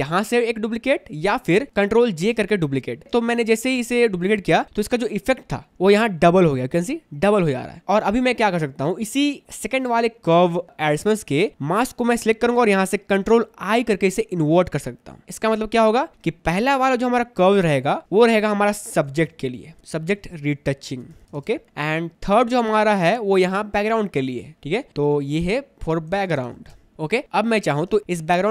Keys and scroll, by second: 2.4 ctrl+j, 3.3 space, 14.5 ctrl+i, 18.9-21.5 typing, 21.6 Return, 26.3 shift+f, 26.4 o, 26.5 r, 26.7 b, 26.9 Return.